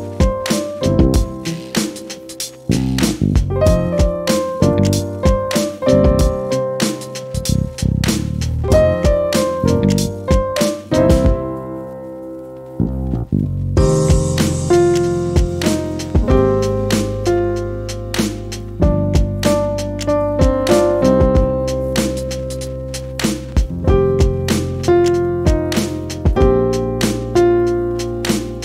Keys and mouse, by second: 0.1 click, 1.8 click, 3.3 click, 4.4 F12, 6.3-7.9 drag, 11.8 ctrl+g, 14.8 click, 15.3 click, 18.8 click, 21.1-24.5 typing, 25.7 F12, 26.8 click, 27.3-27.9 drag.